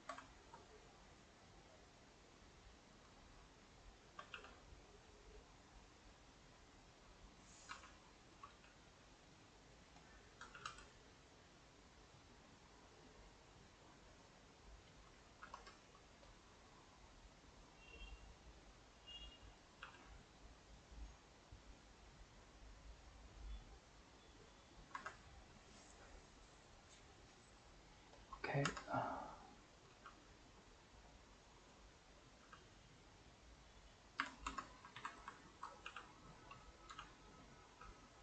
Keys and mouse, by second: 1.6 click, 1.8-3.3 middle drag, 3.3 shift+click, 3.9 shift+click, 4.3 g, 6.4-7.4 middle drag, 7.4 click, 7.7 r, 8.5 g, 9.6 middle click, 10.0 click, 10.4 g, 14.6 middle click, 15.5 Tab, 15.7 shift+middle click, 16.2 click, 16.4-19.8 middle drag, 19.8 g, 24.7 middle click, 24.9 Tab, 25.3-28.2 middle drag, 28.2 click, 28.8 Tab, 29.4 click, 29.9 g, 32.2 click, 32.4 g, 34.6 Tab, 34.8 a, 35.0 a, 35.6 ctrl+Right, 35.9 g, 36.8 click, 36.9 g, 37.5 click, 37.7 g.